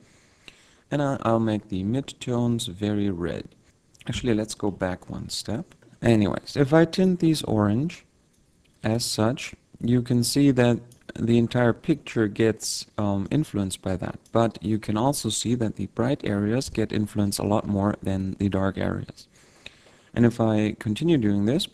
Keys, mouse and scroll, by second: 2.9 click, 5.1 ctrl+y, 7.3 click, 8.7 click, 11.1 click, 13.5 click.